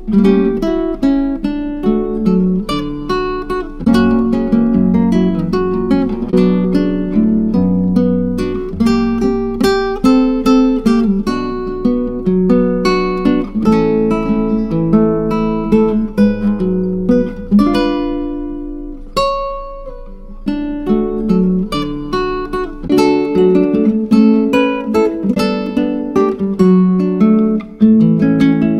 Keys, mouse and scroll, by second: 2.3 middle click, 2.3-2.9 scroll down 4, 2.9 click, 3.3-3.7 scroll up 2, 3.7-11.8 drag, 12.2 click, 15.1-23.1 drag, 26.4-28.6 drag.